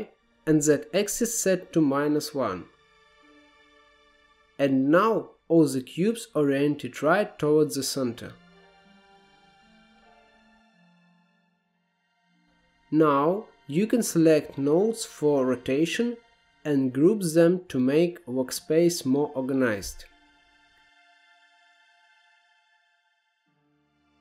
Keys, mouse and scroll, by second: 4.7-7.5 drag, 7.5 scroll down 1, 7.8-8.2 scroll up 1, 8.2-9.7 shift+middle drag, 11.2-12.0 scroll down 8, 12.0-12.4 middle drag, 13.6-15.4 scroll down 5, 15.4-17.4 drag, 17.4-20.9 right drag, 20.9 shift+middle click, 21.3-21.6 scroll up 4, 21.6-22.9 shift+middle drag, 22.9-23.6 drag, 23.6-24.1 scroll down 2, 24.1-24.2 drag.